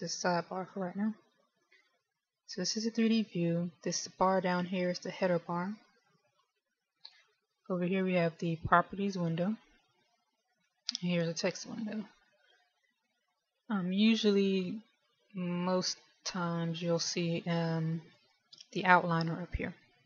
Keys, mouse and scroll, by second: 0.0 t.